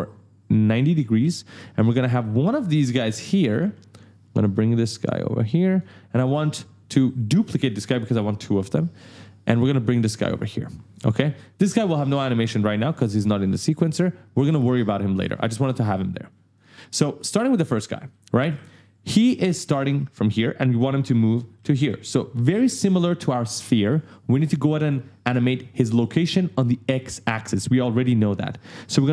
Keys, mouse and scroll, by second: 0.3-3.3 typing, 0.5 right click, 4.5 click, 9.2 alt+click, 16.3 click, 16.5-19.5 typing, 19.5 right click.